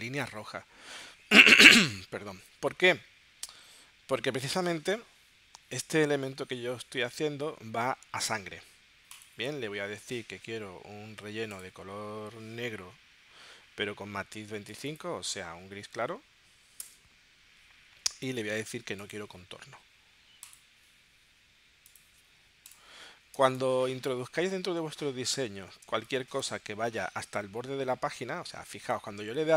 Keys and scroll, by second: 15.6 2, 16.8 Return, 23.4 space, 25.9 space.